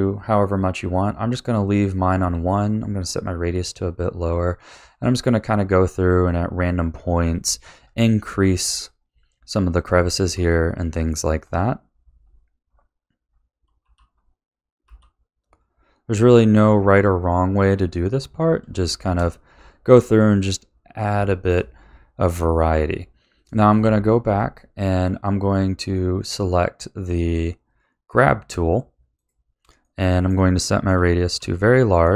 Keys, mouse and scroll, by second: 0.0 middle click, 1.0 click, 1.6 click, 3.1 click, 3.5 click, 3.9 middle click, 4.8 click, 5.1 click, 5.4 click, 5.8 middle click, 7.0 click, 7.2 click, 7.7 middle click, 8.8 click, 9.1 click, 9.8 shift+middle click, 10.5 middle click, 11.4 click, 11.8 click, 12.1 middle click, 12.7 click, 13.3 click, 16.0 middle click, 17.0 click, 17.7 middle click, 18.2 click, 18.7 shift+middle click, 19.5 middle click, 20.1 click, 20.7 click, 21.3 shift+middle click, 21.8 middle click, 29.1 click, 29.6 scroll down 1, 29.8-31.3 middle drag.